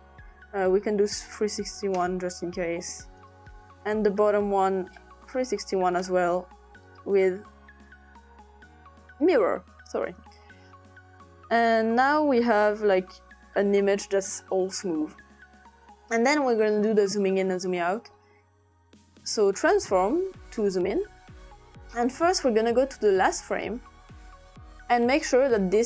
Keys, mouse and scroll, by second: 0.9 click, 1.7 typing, 2.0 Return, 3.2 click, 4.6 click, 5.1-6.2 typing, 6.9 click, 7.9-8.7 typing, 9.2 click, 12.0-13.8 drag, 17.2 click, 18.1 click, 19.6 click, 20.5 click, 21.7 click, 23.7 click, 24.2 click.